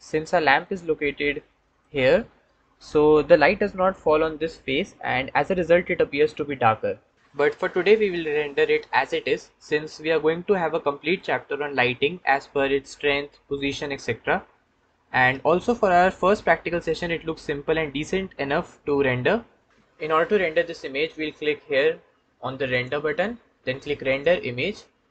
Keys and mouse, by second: 8.2-11.3 ctrl+drag, 15.6 Tab, 19.5 Tab, 22.7-25.1 drag.